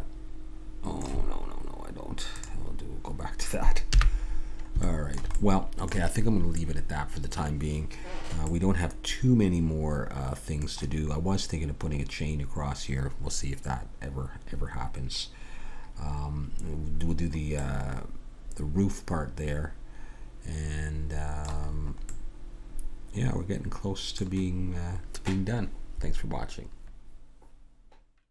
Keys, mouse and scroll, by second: 2.4-4.2 drag, 3.9 n, 4.2 middle click, 4.8-7.1 drag, 8.6-10.3 middle drag, 17.6-19.5 middle drag, 21.7-25.3 middle drag.